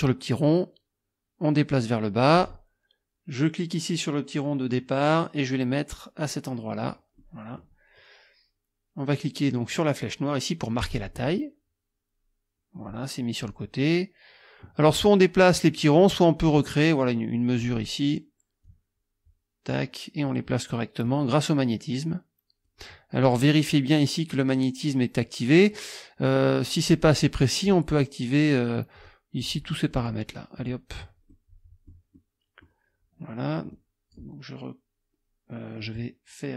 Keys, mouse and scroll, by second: 0.0-2.5 drag, 4.7-7.1 drag, 7.2 click, 10.8 click, 16.6-17.8 drag, 18.7-19.9 drag, 21.1-22.9 drag, 29.0 click, 29.5 click, 30.0 click, 30.6 click, 31.3-32.8 scroll up 2, 33.7 click, 35.8-36.5 drag.